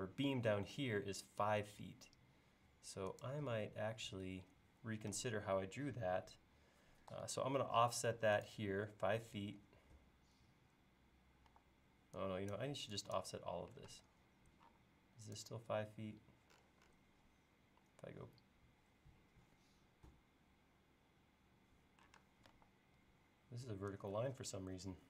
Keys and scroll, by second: 7.1 f, 11.5 e, 13.9 space, 22.2 space, 22.6 e.